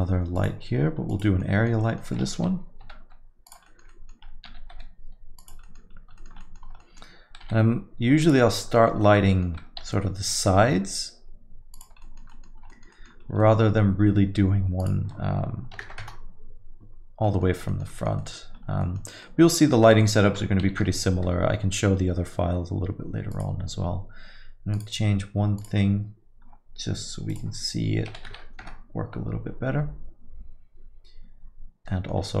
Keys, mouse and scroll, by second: 6.8 middle click, 6.8-7.1 scroll, 6.9 middle click, 6.9 typing, 7.0 middle click, 8.8-9.6 typing.